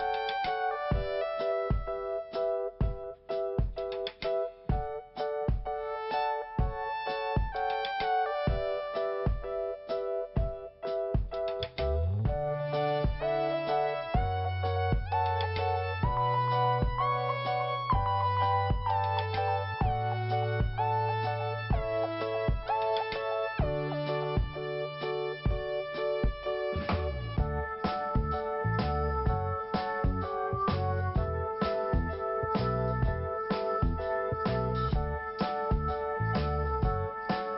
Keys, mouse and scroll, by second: 0.6 click, 2.6 click, 4.3 click, 6.8 click, 7.4-7.8 scroll down 1, 8.9 scroll up 1, 9.4 click, 10.6 click, 14.3 scroll up 1, 15.7 click, 16.1 scroll down 1, 19.0-20.1 scroll up 1, 22.9 click, 26.4 scroll down 1, 27.2-28.5 scroll up 1, 28.8 click, 30.3 click, 32.2 click, 33.0-33.4 scroll up 1, 34.0 click, 35.0 click.